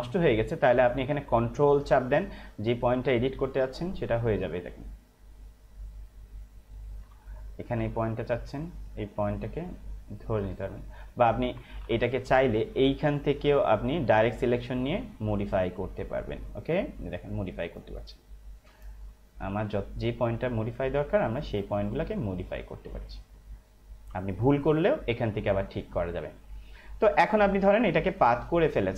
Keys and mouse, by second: 2.8 ctrl+click, 8.1 ctrl+click, 11.9 ctrl+z, 13.2 click, 24.2 space, 24.4 click, 24.7 space, 25.9 click.